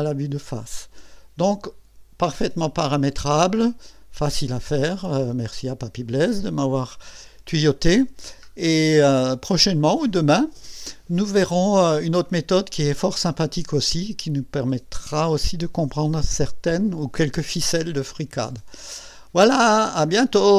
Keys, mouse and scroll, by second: 0.2-4.2 drag, 5.5-6.4 drag, 8.5 scroll up 2, 9.2-9.9 right drag, 18.0 scroll up 2, 18.5-19.2 right drag.